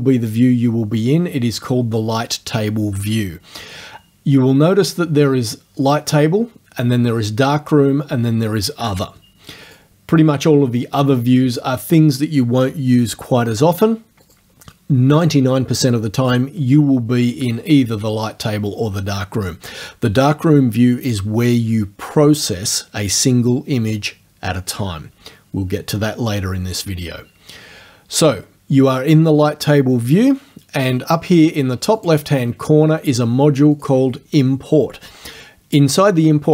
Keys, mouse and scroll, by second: 9.7 click, 14.3 click, 32.0 click, 33.8 click.